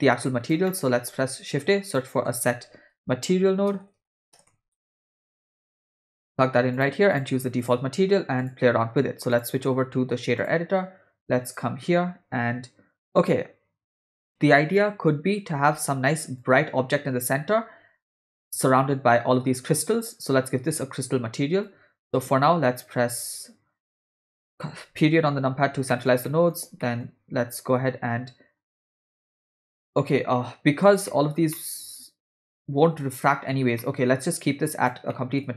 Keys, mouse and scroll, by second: 0.2 click, 0.7-1.0 middle drag, 1.1 shift+a, 3.8 BackSpace, 3.9 BackSpace, 4.9 BackSpace, 5.0 BackSpace, 7.6 click, 9.3-10.5 drag, 11.7 click, 16.4-18.2 drag, 21.7 ctrl+click, 25.0 KP_Decimal, 25.9 middle click, 26.2 ctrl+middle click, 26.9 middle click, 28.8 middle click, 29.6 click, 31.1 ctrl+middle click, 31.5 middle click, 33.8 middle click, 34.4-34.9 drag, 35.1 middle click.